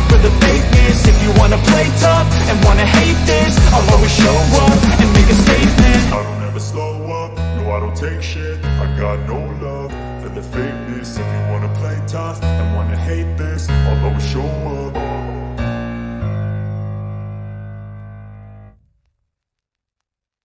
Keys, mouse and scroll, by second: 0.4 click, 0.6 middle click, 0.6-2.7 drag, 3.8-6.6 drag, 7.3 click, 8.0-8.3 drag, 8.3-10.5 middle drag, 10.5 drag, 10.7 middle click, 10.7 click, 14.0-17.9 middle drag, 19.9 middle click.